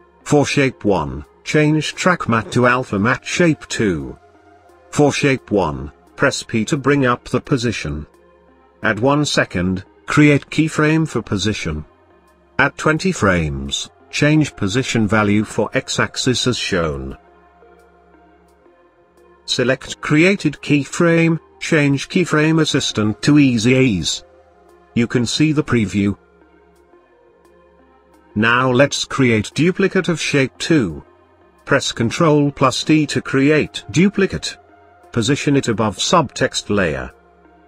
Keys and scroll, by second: 4.7 p, 29.3 ctrl+d.